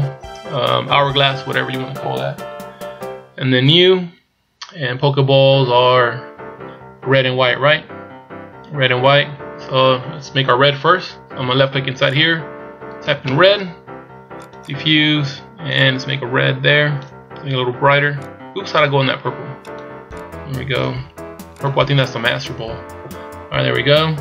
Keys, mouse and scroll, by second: 3.6 click, 7.7 z, 9.3 z, 12.0 click, 14.7 click.